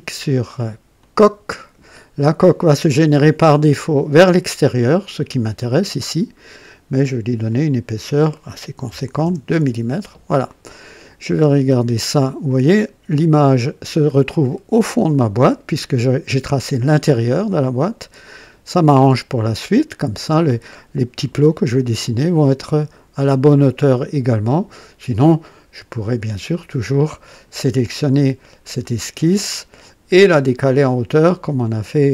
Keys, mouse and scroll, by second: 0.9 click, 5.5-6.0 scroll up 2, 6.4 scroll down 2, 7.4 click, 8.9 KP_2, 9.2 KP_Enter, 10.6 click, 11.4-16.3 drag, 16.5-20.4 drag, 22.0-24.8 drag, 26.5 click, 27.3 click, 28.1 space, 28.8 click, 31.0 click, 31.6 click.